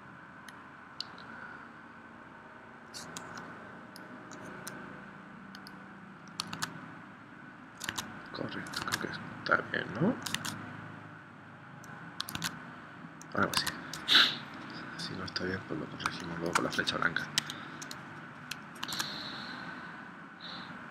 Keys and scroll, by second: 6.5 super+Tab, 7.9 super+Tab, 8.8 super+Tab, 10.4 super+Tab, 12.4 super+Tab, 13.6 super+Tab, 14.2 Escape, 16.1 space, 17.4 Escape, 18.8 super+Tab.